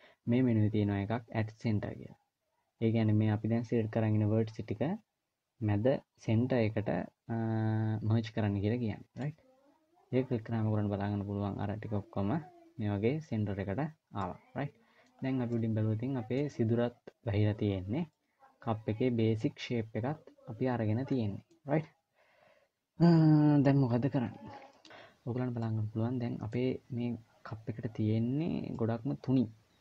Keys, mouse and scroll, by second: 14.0 middle click, 15.0-15.4 scroll down 3, 15.3 middle click, 17.8 scroll down 1, 17.9 middle click, 21.5-22.3 scroll up 1, 22.3 scroll up 1, 24.5 middle click, 24.5-25.3 scroll up 3, 25.3 middle click, 28.5 middle click.